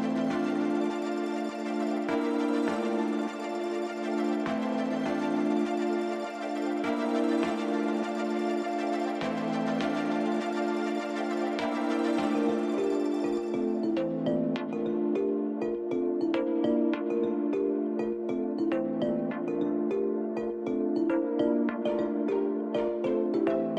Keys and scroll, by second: 1.3 j, 5.0 j, 10.8 g, 13.6 1, 15.4 j, 17.8 j, 18.4 Tab, 19.8 alt+a.